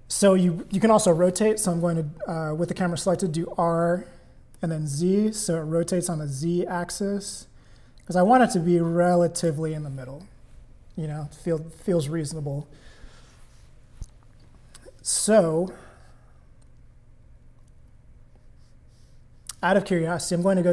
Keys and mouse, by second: 3.1 r.